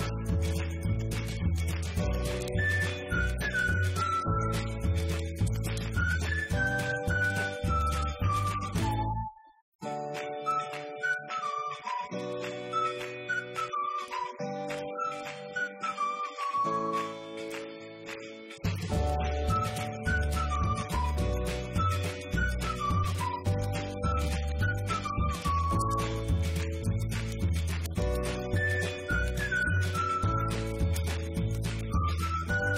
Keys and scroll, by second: 23.4 Up, 24.2-26.0 typing, 27.4 Up, 28.3 ctrl+c, 28.5 Right, 30.0 ctrl+v, 30.7 Left, 31.4 Delete, 31.6 Right, 32.1 Down, 32.2 Left.